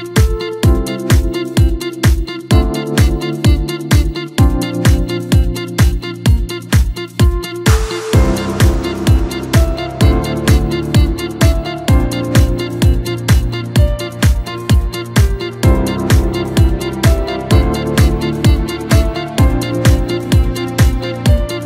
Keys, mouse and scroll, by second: 0.3 s, 2.3 scroll down 2, 2.6 Tab, 3.8 click, 4.3-5.5 middle drag, 5.5 scroll down 1, 5.7-7.8 middle drag, 7.8 KP_3, 8.5 scroll up 2, 8.8-9.1 scroll down 2, 9.1-10.7 middle drag, 10.7 KP_7, 11.4-11.8 scroll up 2, 11.8 s, 14.0 KP_3, 14.6 scroll up 2, 14.9-16.8 scroll down 4, 16.9-21.6 drag.